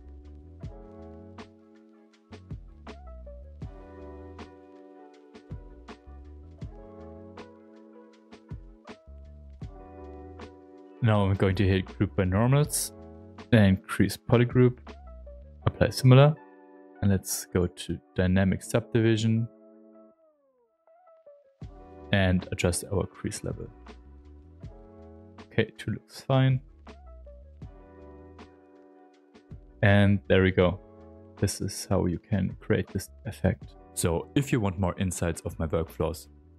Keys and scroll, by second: 0.7 ctrl+z, 1.6 space, 6.6 shift+f, 7.2 shift+f, 26.8 s, 27.4 Escape, 28.3 m, 28.7 space.